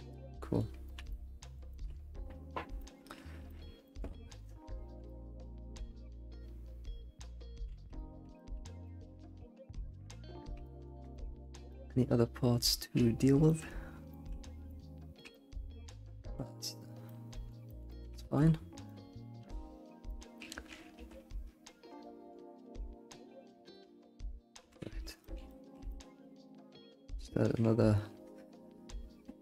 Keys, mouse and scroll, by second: 2.1-2.8 scroll up 3, 2.8-3.1 shift+middle drag, 3.1 scroll up 1, 3.8 middle click, 4.1 alt+shift+z, 5.1-5.7 middle drag, 5.8 alt+shift+z, 5.8-7.7 middle drag, 7.7 alt+shift+z, 8.0-12.3 middle drag, 10.3 scroll down 1, 13.2-14.2 scroll up 5, 13.4-13.7 shift+middle drag, 14.0-17.7 shift+middle drag, 17.9 alt+middle drag, 18.2 shift+middle drag, 18.5-19.0 scroll up 4, 19.0 click, 19.2 scroll down 1, 19.8 alt+shift+z, 20.1 middle click, 21.3 ctrl+1, 22.9-24.0 scroll down 3, 24.0-25.2 scroll down 1, 25.2-26.2 middle drag, 26.3-28.0 scroll up 2.